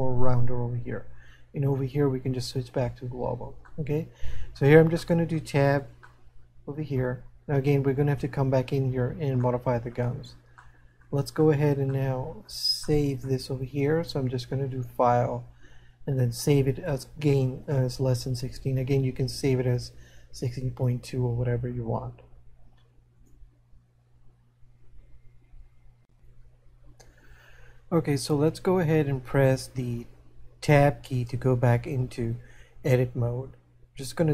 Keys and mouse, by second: 2.3 click, 4.3 middle click, 6.3 middle click, 9.5 middle click, 10.8 middle click, 12.1 shift+middle click, 23.2 click, 32.0 Tab.